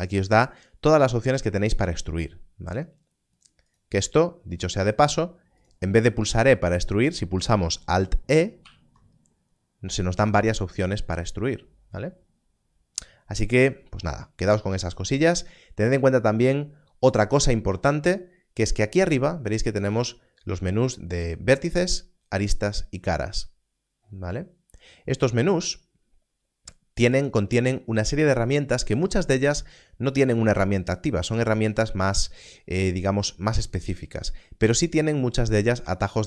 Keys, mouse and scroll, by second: 3.3 u, 6.3 e, 8.6 alt+e, 19.9 click.